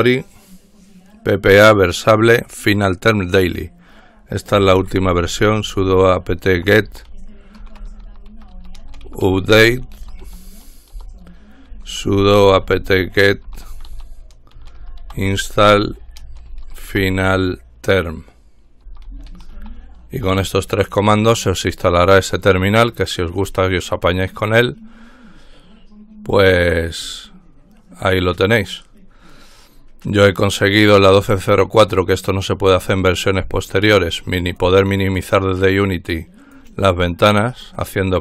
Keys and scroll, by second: 4.7-20.9 typing, 11.1 Return.